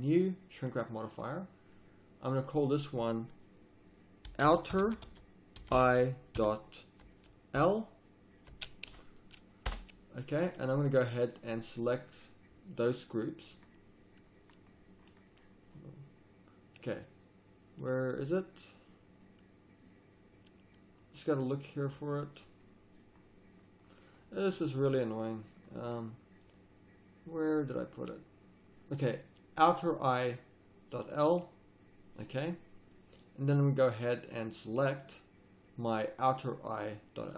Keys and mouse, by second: 34.0-35.4 middle drag, 35.4-37.3 drag.